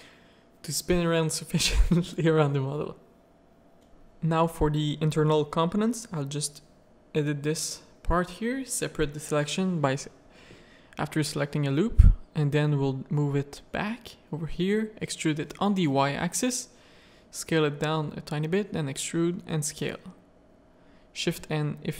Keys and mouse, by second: 2.9 ctrl+s, 4.5 z, 4.8 shift+middle click, 5.3 Tab, 7.3 shift+d, 8.1-8.8 drag, 9.1 Tab, 10.2 Tab, 10.4 a, 10.8 z, 11.3 middle click, 11.7 shift+middle click, 13.9 click, 14.5 e, 16.2 s, 17.6 e, 18.4 s, 19.5 a, 20.1 shift+n, 20.8 z, 21.1 click, 21.7 shift+middle click.